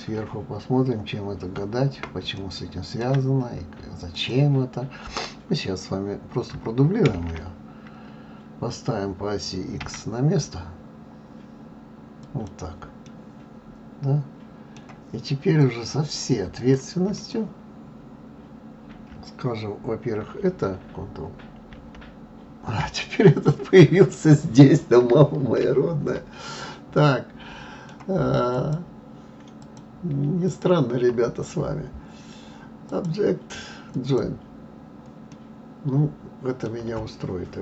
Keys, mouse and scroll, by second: 0.2 KP_7, 1.8-2.3 scroll up 2, 2.4-4.1 shift+middle drag, 4.1 click, 7.2 shift+d, 13.0-15.5 middle drag, 15.5 click, 16.5 click, 17.1 shift+click, 21.7 ctrl+j, 23.0-25.6 middle drag, 25.6 ctrl+z, 26.5 click, 26.9-28.5 middle drag, 28.5 shift+click, 29.6 shift+click, 30.4 shift+click, 32.9-35.3 drag, 35.3-37.6 middle drag.